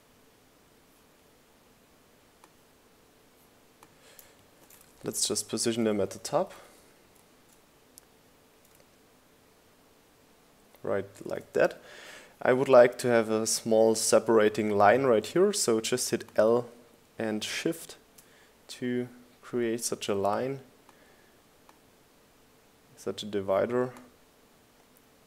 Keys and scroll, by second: 5.9 shift+Left, 6.1 shift+Up, 6.6 shift+Left, 6.8 shift+Up, 7.7 shift+Left, 8.0 shift+Up, 16.3 l, 17.3 l.